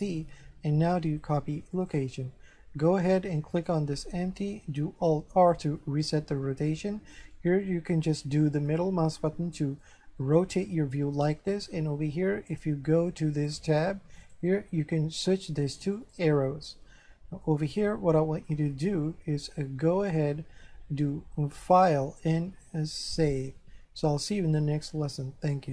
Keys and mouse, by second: 1.7 click, 3.5 right click, 5.5 alt+r, 7.3 middle click, 9.3 middle click, 13.4 click, 16.0 click, 17.8 middle click, 18.9 shift+middle click, 21.6 click, 23.2 click.